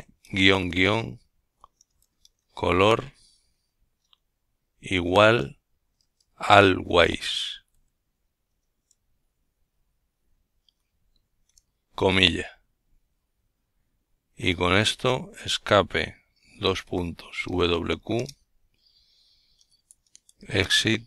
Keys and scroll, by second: 0.6-2.1 typing, 5.6 ctrl+alt+t, 7.7-8.7 typing, 16.1-17.6 typing, 19.3-19.6 typing, 19.9 Return, 20.9-21.0 typing.